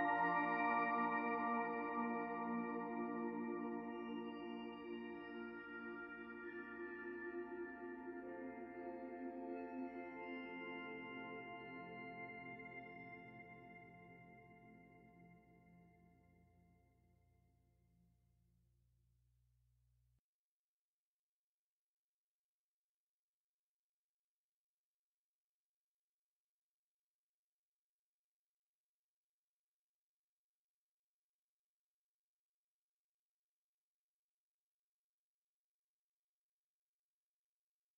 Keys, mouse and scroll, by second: 1.5 shift+d, 2.4 click, 4.6 r, 6.4 click, 8.7 middle click, 9.7 click, 11.7 middle click, 12.5 shift+middle click, 14.6 shift+d, 15.8 click, 16.8 click, 17.9 scroll up 2, 18.2 middle click, 20.4 click, 22.4 r, 25.8 r, 27.8 click, 29.1 middle click, 30.5 click, 31.7 middle click, 32.2-32.9 scroll down 2, 33.0 shift+middle click, 33.5 middle click, 34.9 shift+middle click, 35.7 middle click, 37.2 shift+right click.